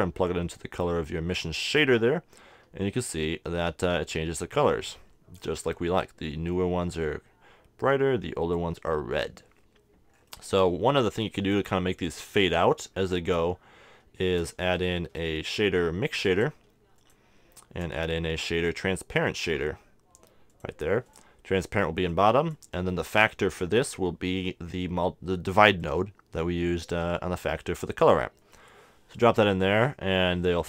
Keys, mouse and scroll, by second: 10.1-12.1 middle drag, 11.2-13.1 drag, 13.5-15.3 middle drag, 14.4 shift+a, 17.2-18.7 drag, 17.6 shift+a, 21.2-24.0 drag, 22.8-24.6 middle drag, 25.8-27.6 drag.